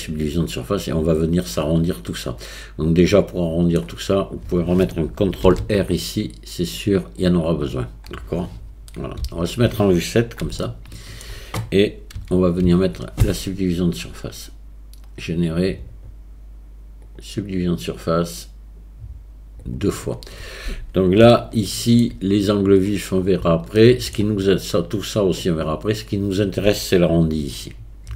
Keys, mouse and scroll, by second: 1.5-2.5 middle drag, 3.3 middle click, 3.5 middle click, 5.5 ctrl+r, 9.2 KP_7, 10.6 shift+middle click, 12.2 a, 12.7 Tab, 14.0-17.2 drag, 19.7 click, 21.3-21.9 shift+middle drag, 23.8-24.1 shift+middle drag.